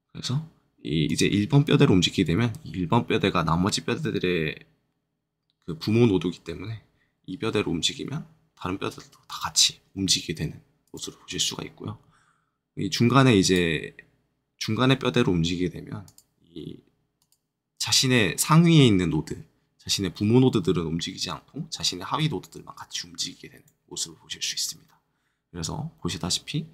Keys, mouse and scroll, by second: 1.0 click, 7.3 r, 9.2 right click, 9.9 g, 10.8 right click, 13.4 click, 16.0 click, 21.1 click, 22.1 r, 23.5-26.7 right drag.